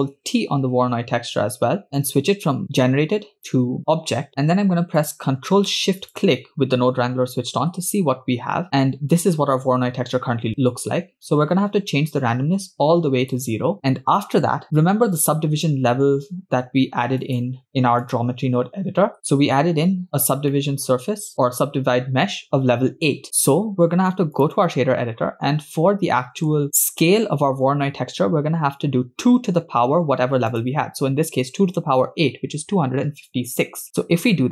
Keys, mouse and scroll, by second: 0.6 ctrl+t, 1.6 scroll up 2, 2.4-3.4 drag, 5.0 click, 6.4 ctrl+shift+click, 7.1 scroll down 2, 7.7-8.6 scroll down 4, 8.7-9.2 scroll up 3, 10.6 middle click, 12.1-13.3 drag, 13.8 scroll up 6, 14.4-14.7 scroll down 4, 14.6 middle click, 17.2-18.2 drag, 19.3 middle click, 19.3 scroll down 4, 20.2 scroll up 1, 20.5 middle click, 20.9-21.6 scroll up 2, 23.3-24.5 drag, 25.3 scroll down 2, 25.5-26.5 middle drag, 26.6 scroll up 2, 30.5-33.7 drag.